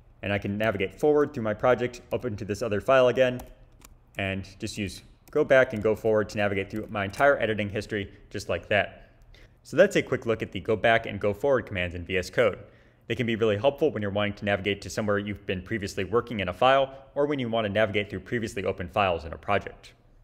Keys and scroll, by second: 0.6 ctrl+shift+-, 2.1 ctrl+shift+-, 3.4 ctrl+shift+-, 4.1 ctrl+-, 5.3 ctrl+-, 6.0 ctrl+shift+-.